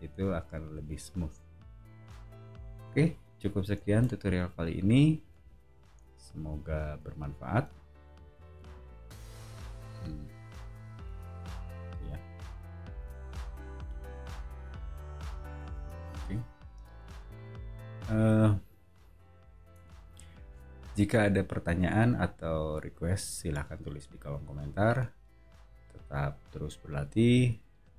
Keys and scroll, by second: 15.7 space, 17.1 [.